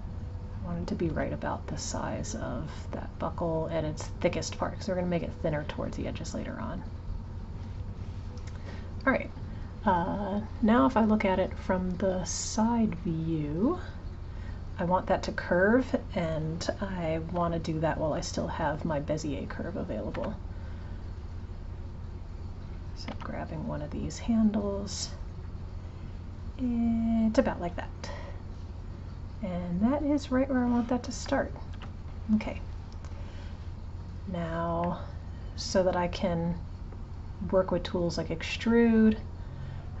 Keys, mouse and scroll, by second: 0.0 click, 12.8 click, 19.6 click, 21.4 click, 22.7 click, 23.2 g, 31.8 Tab, 34.9-37.9 middle drag, 39.7-40.0 drag.